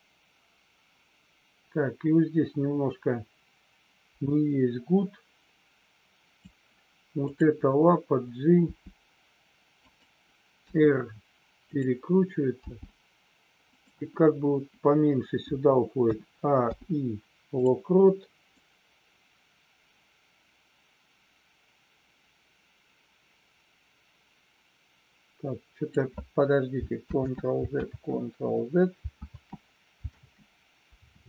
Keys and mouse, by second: 8.6 g, 9.7 click, 10.6 r, 11.6 click, 12.6 g, 13.6 click, 16.5 i, 18.6-26.0 drag, 27.3 ctrl+z, 28.0 ctrl+z.